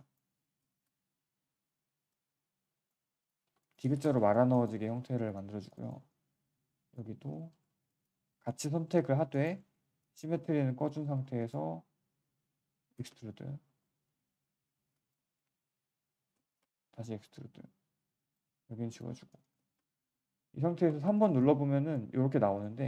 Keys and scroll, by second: 2.9 q, 5.9 alt+w, 10.3 w, 18.5 q, 20.6 3, 22.7 1.